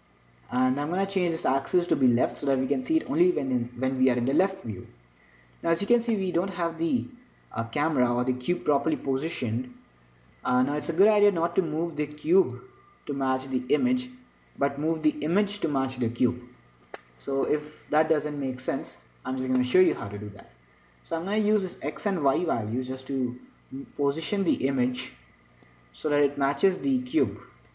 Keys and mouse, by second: 0.0-6.5 drag, 6.5-8.5 middle drag, 8.5 z, 10.6 z, 11.2 z, 12.8-14.9 drag, 16.6 z, 17.4-23.3 middle drag, 23.3-25.2 drag, 26.5-27.7 drag.